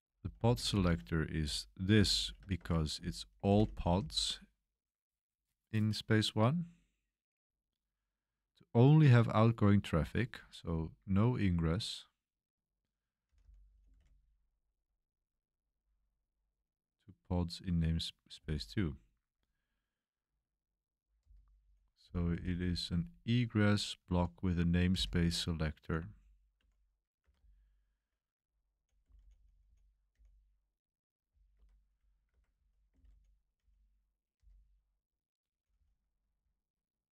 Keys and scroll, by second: 0.0-0.7 typing, 1.9-4.1 typing, 10.5 j, 13.0-14.7 typing, 18.3 k, 19.2 j, 20.9-30.1 typing, 31.2 k, 32.3-37.1 typing.